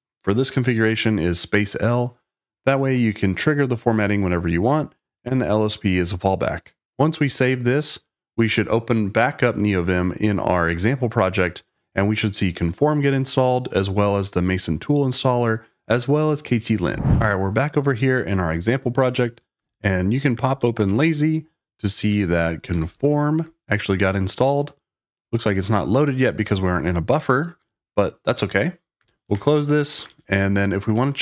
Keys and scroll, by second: 19.5-23.4 typing, 28.7-30.8 typing.